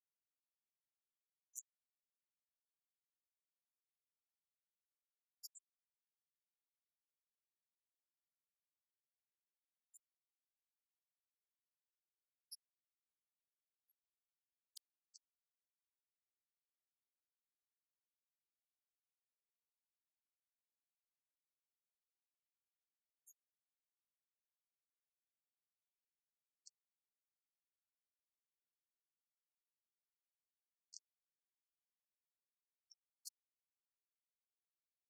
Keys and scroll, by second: 14.8 Tab.